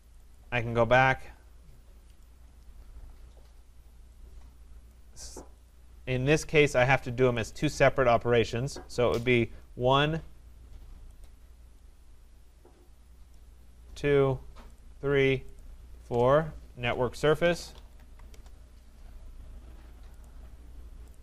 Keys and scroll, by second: 18.3 Return.